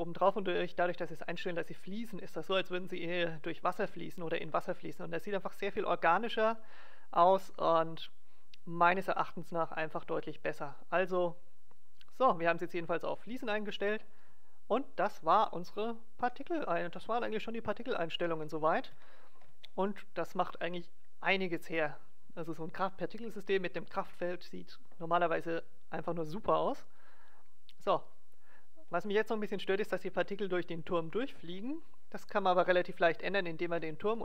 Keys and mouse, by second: 8.0-9.7 right drag, 13.4 alt+a, 15.8 middle click, 17.4-18.6 middle drag, 18.7 middle click, 19.3-20.6 middle drag, 27.3-28.7 middle drag, 28.9-31.1 middle drag.